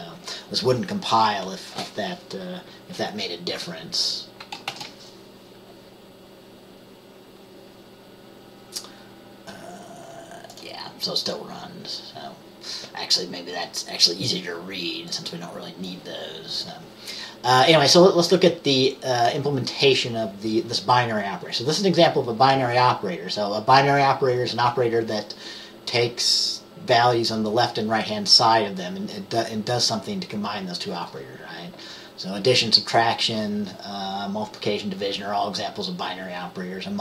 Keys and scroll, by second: 4.8 ctrl+b.